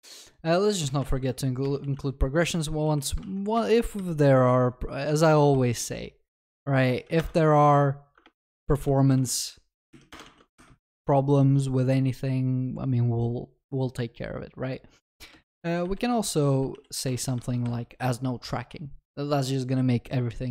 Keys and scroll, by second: 2.4 ctrl+d, 2.4 Return, 7.2 ctrl+w, 8.2 Return, 10.1 ctrl+BackSpace, 10.3 ctrl+s, 17.1 Return, 17.4 ctrl+s.